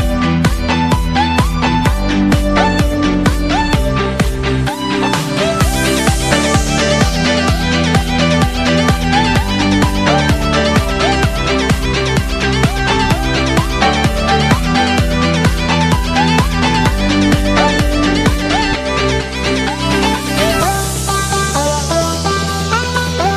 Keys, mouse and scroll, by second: 0.4 middle click.